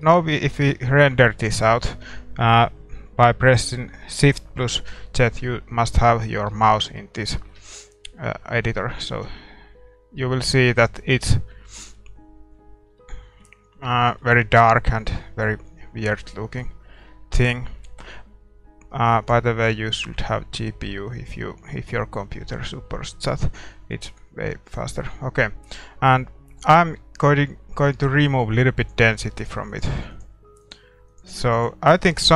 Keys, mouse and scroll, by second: 9.2 shift+z, 10.2-12.9 middle drag, 13.0-19.2 middle drag, 19.3-23.9 drag, 23.9-26.2 middle drag, 26.2-28.9 scroll up 1, 28.9-32.3 drag.